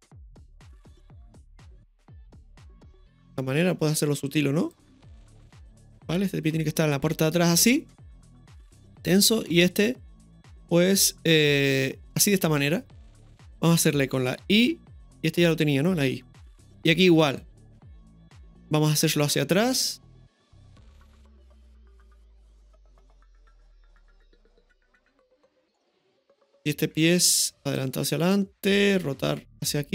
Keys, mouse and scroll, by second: 0.0-7.7 drag, 5.7 ctrl+z, 5.7 right click, 14.6 i, 15.4-17.4 right drag, 17.4-18.9 drag, 18.9-20.4 right drag, 20.9-22.7 drag, 23.4 right click, 25.2 click, 26.5 right click, 27.8-28.3 drag.